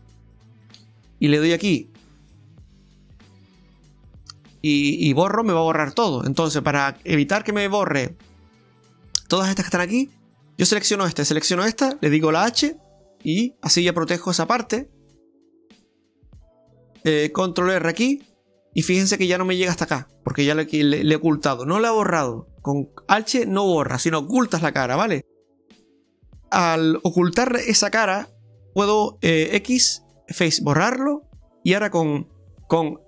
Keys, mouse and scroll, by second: 1.2 right click, 1.6 alt+shift+right click, 2.6 click, 4.2 alt+shift+right click, 5.3 middle click, 6.4 middle click, 8.0 shift+middle click, 8.5 middle click, 10.0 right click, 11.4 shift+right click, 12.4 h, 12.7 scroll down 3, 13.0 middle click, 14.1 middle click, 15.5-15.8 scroll up 2, 16.2 middle click, 16.6-17.1 scroll up 1, 17.9 alt+shift+right click, 18.6 scroll down 1, 19.0 middle click, 25.8 scroll down 1, 26.1 middle click, 28.1 middle click, 29.6 x, 30.9 middle click, 32.3 a, 32.8 right click.